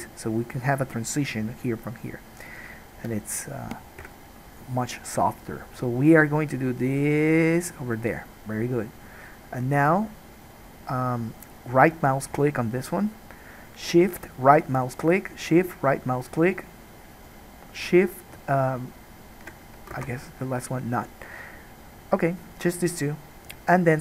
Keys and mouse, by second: 4.2 KP_1.